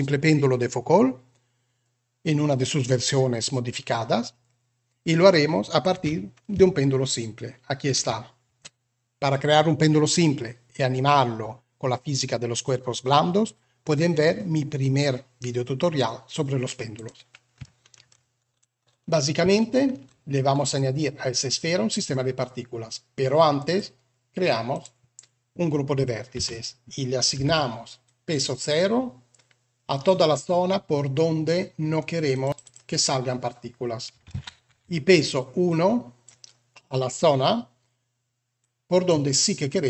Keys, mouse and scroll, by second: 5.8 r, 17.5-17.9 shift+middle drag, 19.4-19.9 shift+middle drag, 24.5 click, 26.2 Tab, 27.2 b, 32.1 click, 32.4 click, 34.2 alt+a, 34.6 b, 38.5 click, 39.6 click.